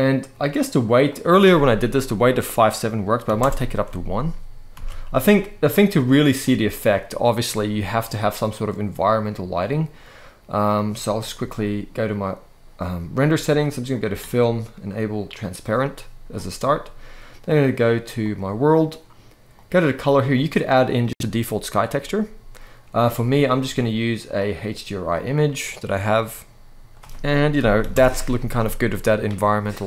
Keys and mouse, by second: 0.8-3.1 drag, 4.4 alt+a, 10.4 click, 13.6 click, 15.0 click, 17.9 click, 19.4-20.8 drag, 22.9-24.2 drag, 24.9 click, 26.9 click, 29.5 alt+a.